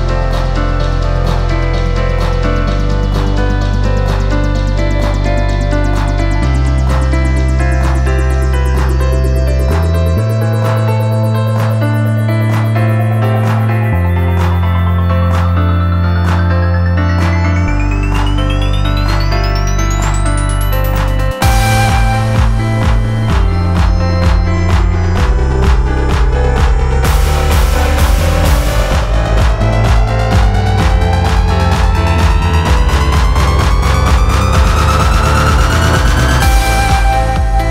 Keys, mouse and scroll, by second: 1.1 click, 2.3 ctrl+z, 5.3 click, 6.1 ctrl+z, 6.5 ctrl+z, 7.5 ctrl+z, 7.8 ctrl+z, 8.3 ctrl+z, 8.6 ctrl+z, 9.8 alt+scroll up 9, 10.0 alt+scroll down 3, 10.4 ctrl+z, 10.7 ctrl+z, 11.3 alt+scroll, 11.6 ctrl+z, 13.0 ctrl+z, 13.4 ctrl+z, 13.5 alt+scroll up 5, 13.7 alt+scroll down 8, 14.3 scroll up 5, 14.6 scroll down 7, 14.9 alt+scroll up 1, 18.2 ctrl+0, 36.9 click.